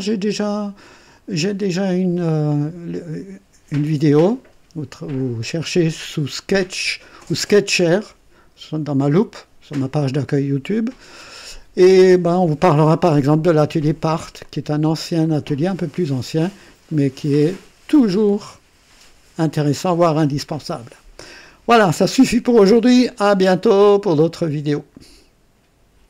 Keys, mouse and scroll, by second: 18.0 click, 24.9 right click.